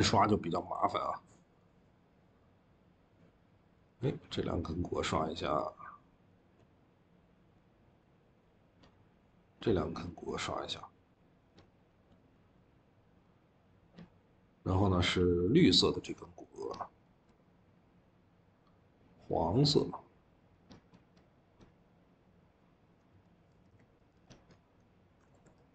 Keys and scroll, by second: 23.0 Escape, 23.4 v, 23.5 v, 23.8 Escape, 24.0 Escape, 25.1 ctrl+z.